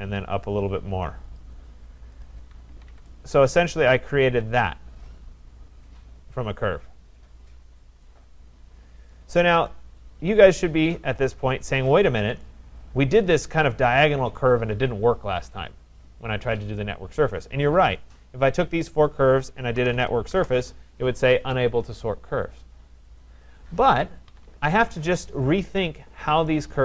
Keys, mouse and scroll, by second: 0.0-0.1 typing, 1.3 click, 2.2 click, 2.7 Escape, 2.9 Return, 2.9 Escape, 8.0 right click, 8.6 middle click, 8.7 middle click, 9.7 right click, 12.4 right click, 13.4 click, 18.0 click, 19.1 click, 19.5-20.4 typing, 23.6 click, 24.3 Escape, 24.4 Escape, 26.5 right click.